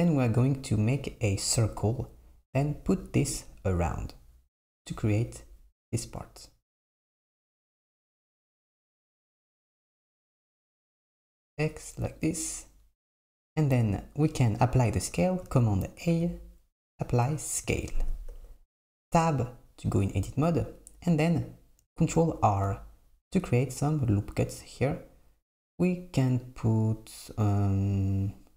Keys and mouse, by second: 7.5 KP_0, 8.4 KP_7, 10.7 s, 13.4 click, 13.7 Tab, 14.2 Tab, 16.1 a, 18.4 Tab, 22.5 ctrl+r.